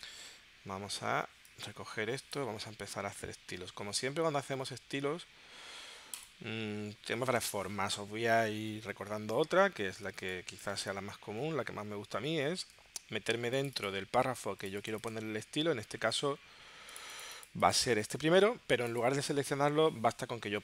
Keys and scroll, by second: 10.1 space.